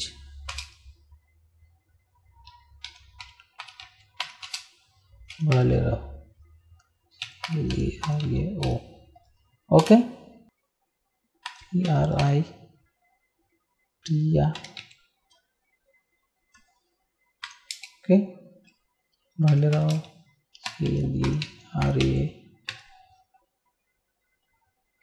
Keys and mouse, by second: 0.0-0.5 typing, 2.9-9.2 typing, 9.8 Return, 11.5 shift+p, 11.8 r, 14.7 a, 17.4 Down, 17.7 space, 19.2-22.7 typing.